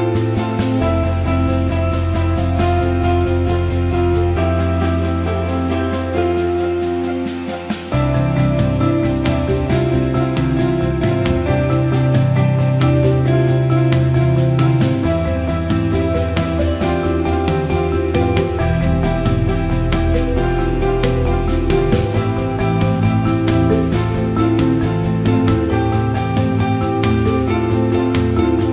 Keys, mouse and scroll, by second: 5.2 alt+middle click, 7.4 Tab, 7.8-9.8 right drag, 11.0 ctrl+z, 11.4-12.1 drag, 12.6-13.9 right drag, 13.9 click, 14.6-16.3 drag, 16.5 alt+middle click, 18.0 click, 19.1-20.8 drag, 21.9 click, 22.4 click, 23.4 click, 24.0 click, 24.2 alt+middle drag, 25.4 click, 26.7 click, 28.4-28.7 drag.